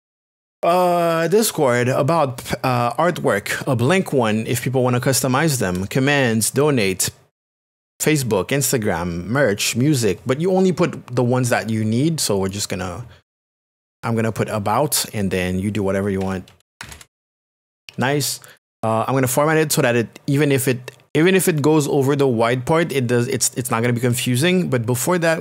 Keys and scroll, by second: 15.9-17.3 typing.